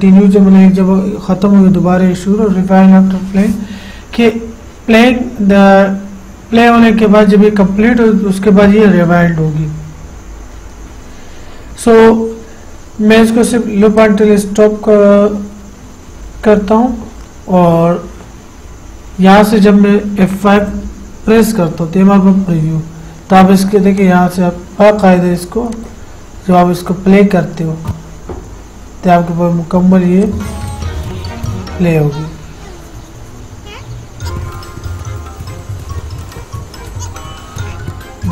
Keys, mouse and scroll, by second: 14.2 click, 14.2 click, 20.9 F5, 24.2 click, 30.4 click.